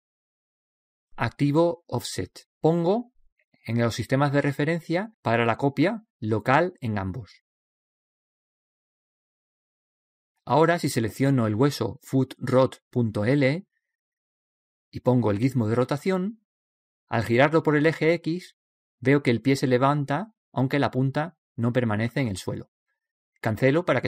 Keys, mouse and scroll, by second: 2.9-5.5 drag, 6.2-8.0 drag, 12.5-14.4 right drag, 15.7-17.6 drag, 17.7-19.6 drag.